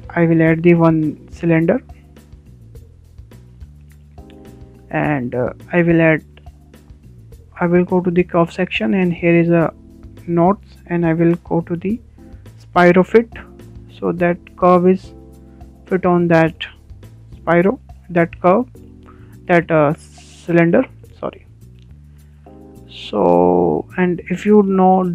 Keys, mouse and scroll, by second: 1.4 shift+a, 1.6 shift+a, 4.8 shift+middle click, 5.7 scroll up 1, 6.0-7.6 shift+middle drag, 7.4 shift+a, 7.6 shift+a, 14.9-23.6 middle drag, 23.6-24.2 shift+scroll up 2, 24.2-25.1 shift+middle drag.